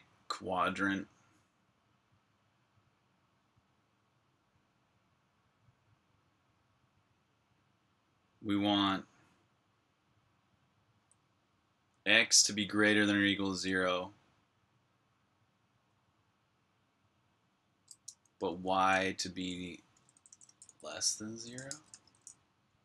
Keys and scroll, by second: 18.4 Escape, 18.6-22.8 typing.